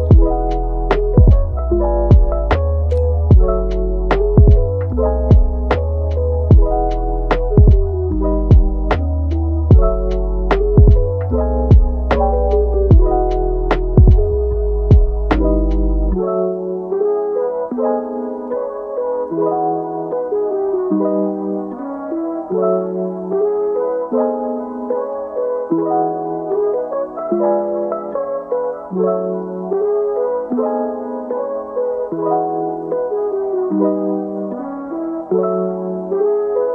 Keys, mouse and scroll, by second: 0.9 g, 2.0-3.6 middle drag, 3.6 click, 3.9 g, 5.3 click, 5.6 g, 7.6 click, 8.1-9.8 middle drag, 9.8 g, 11.1-13.1 middle drag, 13.1 click, 14.7 click, 15.0 g, 16.4 click, 16.8 click, 17.0 g, 18.5 click, 18.7 g, 20.2 click, 20.4 g, 21.7 click, 22.1 g, 23.3 scroll down 1, 23.5 middle click, 23.9 Tab, 24.2 Tab, 24.7 click, 25.3 alt+s, 27.1 click, 27.5 alt+s, 28.3 Tab, 28.7-29.1 middle drag, 29.1-29.6 scroll up 2, 30.7 shift+d, 32.0 Tab, 32.7 middle click, 33.1 Tab, 33.7 g, 35.5 Tab, 36.0 click, 36.5 g.